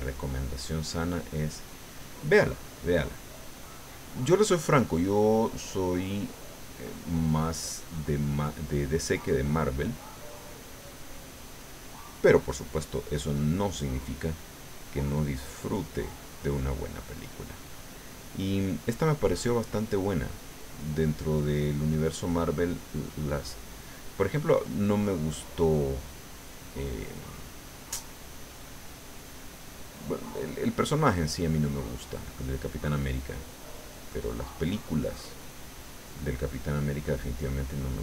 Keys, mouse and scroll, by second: 4.1-5.3 middle drag, 5.5 middle click, 6.6 middle click, 7.7 middle click, 9.1-14.8 drag, 15.1 middle click, 15.8-18.9 drag, 19.0 middle click, 20.1 middle click, 21.1-28.1 drag, 28.2 middle click, 29.4 middle click, 30.4-31.5 drag, 31.5 middle click, 32.6-35.4 middle drag, 35.6-38.0 drag.